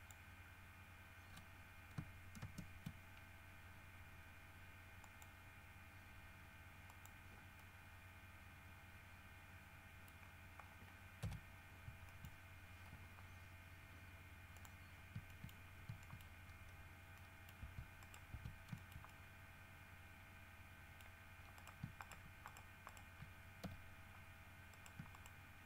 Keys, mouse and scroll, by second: 2.6 ctrl+space, 5.2 middle click, 7.1 middle click, 7.8-10.4 middle drag, 10.4 scroll up 2, 10.8 scroll down 2, 11.4 KP_3, 12.3 shift+middle click, 14.8 middle click, 15.5 shift+middle click, 16.1-17.1 shift+scroll up 6, 16.2 shift+middle click, 17.4 middle click, 17.8 Tab, 18.2 middle click, 18.6 Tab, 19.0-21.4 shift+middle drag, 21.8 shift+middle click, 22.2 shift+middle click, 22.7 shift+middle click, 23.1 shift+middle click, 23.8 shift+f, 24.9 shift+middle click, 25.4 shift+middle click.